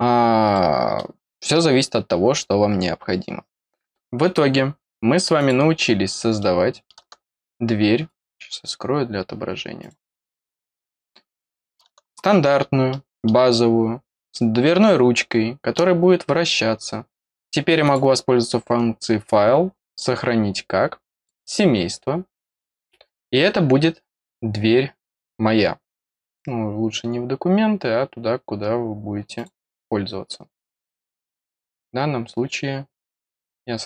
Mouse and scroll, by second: 0.5 middle click, 2.9-3.3 scroll down 1, 5.3 click, 6.4 middle click, 7.0 scroll up 1, 8.0 click, 9.8 click, 10.4 click, 11.1 middle click, 11.9 scroll up 2, 12.2 scroll down 2, 12.3 scroll up 4, 12.9 middle click, 13.7 scroll down 2, 14.3-15.7 middle drag, 17.8 click, 19.9 click, 21.2 click, 26.3 click, 29.3 click.